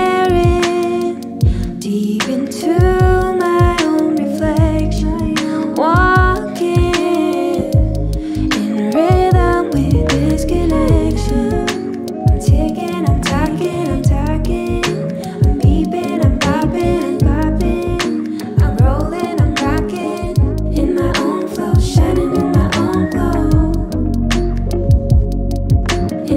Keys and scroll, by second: 0.6 ctrl+=, 3.0 Up, 4.8 Down, 7.9 ctrl+-.